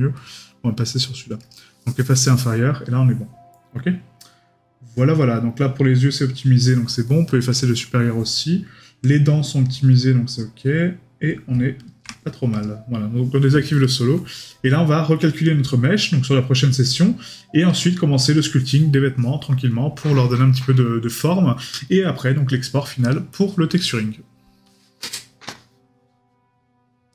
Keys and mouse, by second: 13.8 right click.